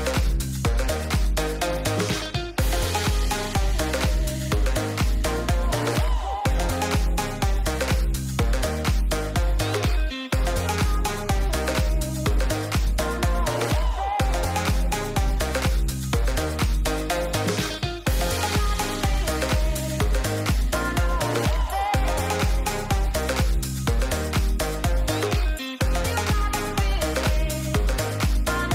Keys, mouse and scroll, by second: 0.0 n, 1.5 ctrl+click, 2.4 middle click, 4.8 shift+click, 7.4 ctrl+click, 11.2 shift+click, 13.5 ctrl+click, 16.7-17.8 shift+middle drag, 18.7 ctrl+middle click, 19.9 shift+click, 21.3 shift+middle click, 23.4-24.8 shift+drag, 25.7 ctrl+click, 26.5 shift+middle click, 27.0 shift+middle click, 28.5-28.7 shift+drag.